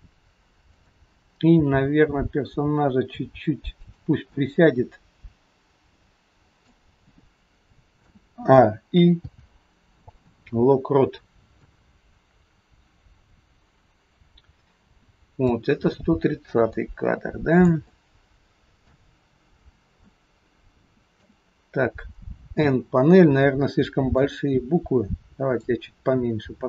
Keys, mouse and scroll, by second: 0.7 click, 1.6 g, 4.4 middle click, 8.0 a, 9.2 i, 11.8 click, 16.0-17.2 scroll down 3, 16.7 middle click, 17.9 shift+middle click, 17.9-18.6 shift+scroll up 1, 19.7-20.0 scroll down 4, 20.2 shift+middle click, 22.6 n, 24.3 click.